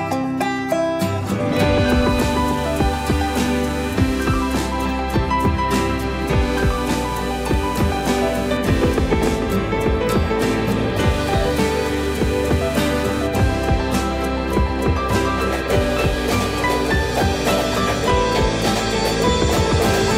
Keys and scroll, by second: 7.1 space, 10.2 space, 11.8 q, 17.6 m.